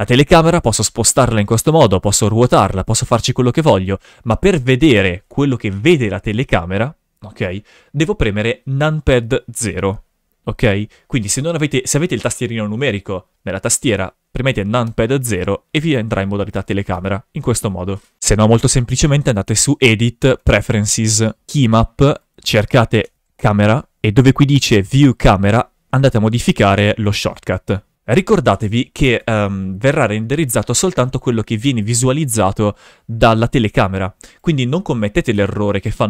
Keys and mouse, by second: 1.7 right click, 1.8 r, 1.9 r, 3.1 right click, 14.8 KP_0, 16.5 KP_0, 16.9 KP_0, 17.4 KP_0, 19.4-20.5 drag, 28.1-33.0 typing, 34.2 right click, 35.3 KP_0.